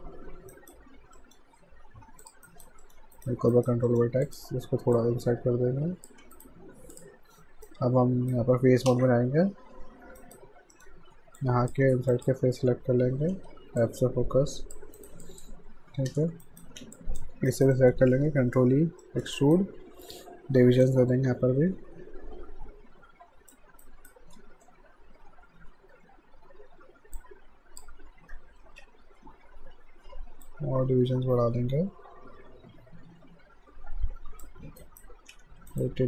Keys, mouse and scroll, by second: 0.5 alt+right click, 1.2 alt+middle click, 2.2 click, 2.5 alt+right click, 2.8 alt+middle click, 3.2 right click, 3.5 alt+right click, 3.9 alt+middle click, 4.3 click, 4.5 w, 5.0 click, 6.2 q, 6.4 right click, 6.9 click, 7.7 right click, 8.9 space, 9.6 f, 10.2 alt+right click, 10.7 alt+middle click, 11.4 click, 12.1 ctrl+click, 13.2 f, 13.8 alt+click, 15.0 alt+right click, 15.3 alt+click, 16.1 space, 16.4 alt+right click, 17.0 click, 17.5 right click, 17.7 middle click, 18.6 ctrl+e, 19.0 alt+middle click, 19.4 alt+right click, 20.8 click, 23.8 alt+right click, 27.2 click, 28.7 ctrl+z, 30.4 click, 34.8 alt+right click, 35.3 q, 35.7 right click.